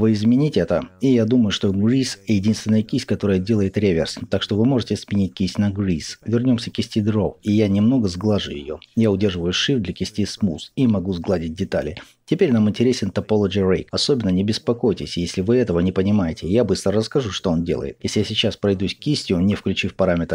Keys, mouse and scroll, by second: 6.4 click, 7.1-18.1 shift+drag, 17.9 f, 18.7-20.3 drag.